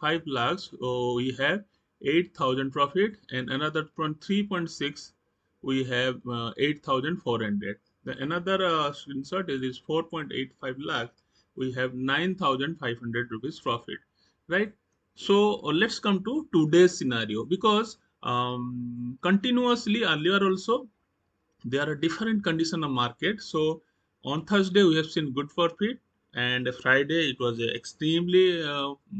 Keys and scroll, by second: 2.6 Right, 7.1 Right, 13.5 Right.